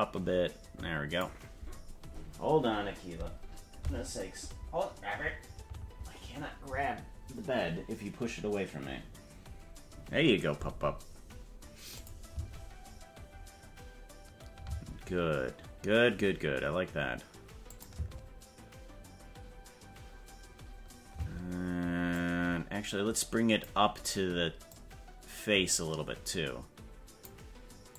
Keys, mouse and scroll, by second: 11.9 click, 12.3 space, 14.7 space, 17.7 click, 17.9 space, 21.1 space, 22.1-23.6 drag, 24.6-27.2 drag, 27.9 click.